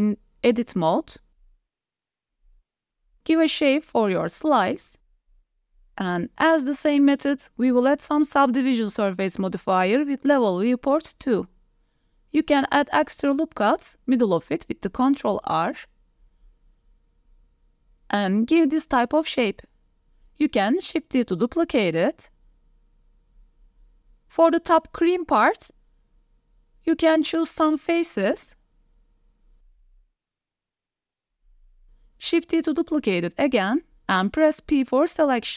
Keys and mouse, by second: 0.0 s, 1.2 g, 2.5 click, 2.6 KP_1, 2.8 g, 2.9 z, 3.8 click, 3.9 Tab, 4.0 middle click, 4.3 Tab, 4.5 click, 4.8-5.6 typing, 6.4 Tab, 6.5 middle drag, 7.4-8.0 middle drag, 8.2 shift+middle drag, 8.4 middle click, 9.0 ctrl+1, 9.3 middle click, 10.0 right click, 11.5 right click, 11.8 middle click, 12.3 Tab, 12.8 ctrl+r, 13.4 click, 13.7 s, 14.0 y, 14.6 s, 14.8 x, 15.7 click, 16.4 ctrl+t, 16.8 ctrl+z, 17.0 click, 17.6 ctrl+r, 18.1 click, 18.3 s, 18.5 z, 20.1 g, 20.2 z, 20.8 shift+click, 20.9 click, 21.0 Tab, 21.4 shift+middle click, 21.8 shift+d, 22.0 z, 23.7 KP_1, 23.8 shift+d, 24.0 z, 25.4-25.9 middle drag, 26.0 Tab, 26.7 shift+middle click, 27.2 3, 29.7 middle click, 31.6-32.8 middle drag, 33.0 shift+d, 34.6 p, 35.4 Tab.